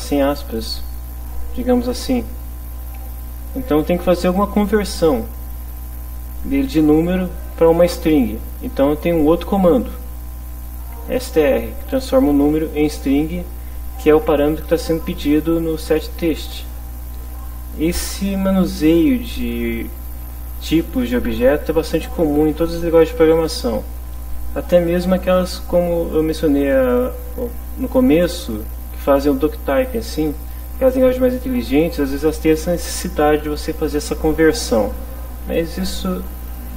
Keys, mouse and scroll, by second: 10.5 click, 11.8 click, 15.2 click, 17.1 click.